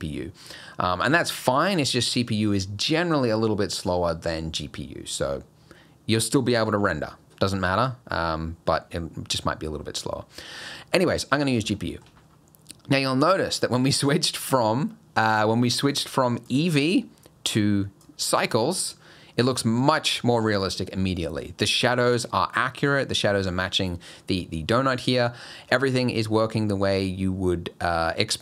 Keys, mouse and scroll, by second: 0.4 scroll up 1, 9.8 scroll up 2, 11.8 shift+middle click, 12.2 scroll down 2, 13.5-14.0 scroll down 4, 15.7 click, 16.0 click, 17.5 click, 19.7 scroll up 4, 20.7 scroll up 1, 21.9 scroll up 2, 24.1-25.2 scroll down 7, 25.7-26.0 scroll up 4.